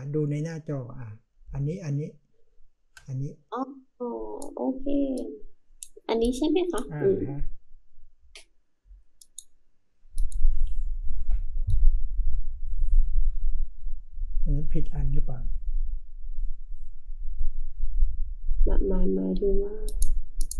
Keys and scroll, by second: 1.4-2.9 space.